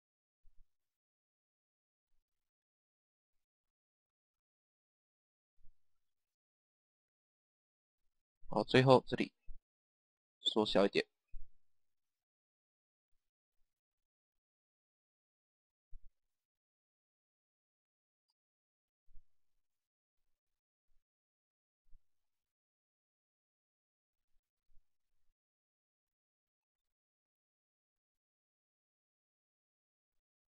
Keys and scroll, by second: 6.9 Page_Down, 13.0 Page_Down, 18.0 Page_Down, 22.1 Page_Down, 27.2 Page_Down.